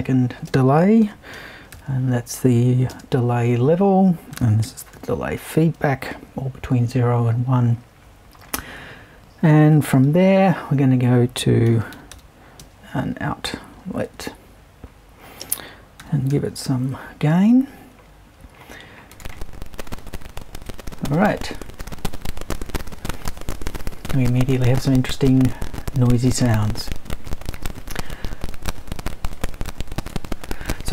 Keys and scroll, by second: 0.5-2.9 typing, 4.1-5.4 typing, 8.6 super+`, 9.7 BackSpace, 10.0 super+i, 11.4-14.0 typing, 15.4-17.1 typing.